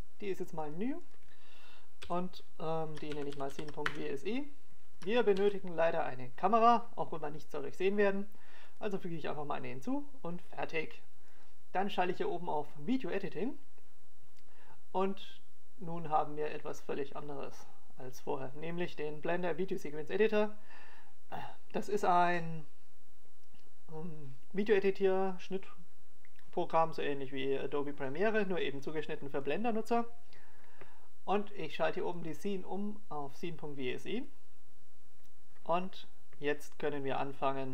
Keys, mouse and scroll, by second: 0.7 click, 5.5 shift+a, 11.5 click.